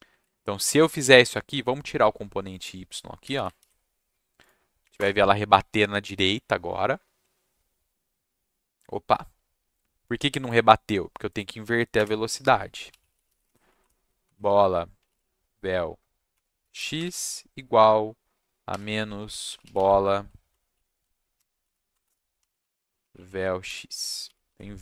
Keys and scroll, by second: 0.8 ctrl+s, 3.6 ctrl+s, 4.8 Up, 4.9 Return, 11.9 Return, 12.6-17.4 typing, 18.7-20.2 typing, 21.3-24.2 typing, 24.5 ctrl+s.